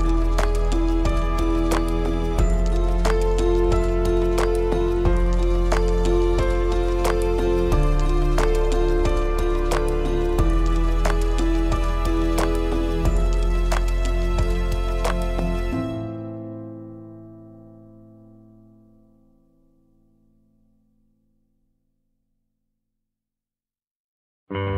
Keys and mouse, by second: 0.5 shift+click, 0.9 click, 5.1 Tab, 6.4 click, 7.3 ctrl+click, 8.7 shift+click, 9.9 ctrl+click, 10.6 middle click, 15.3 click, 16.6 middle click, 20.1-23.2 middle drag, 24.0 Tab.